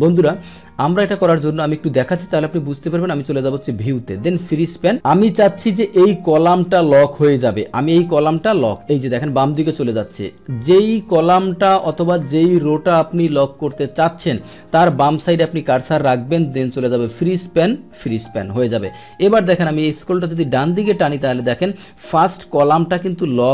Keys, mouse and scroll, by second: 1.3 click, 6.8 click, 8.4-10.1 drag, 17.0 click, 18.0 click, 19.9-23.5 drag.